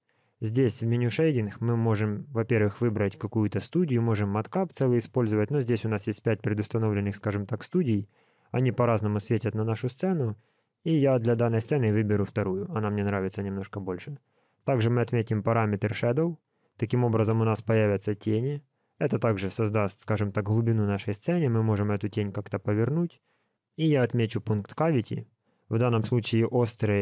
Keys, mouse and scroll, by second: 1.0 click, 9.6 click, 14.2 click, 17.3 middle click, 20.2 middle click, 21.6 click.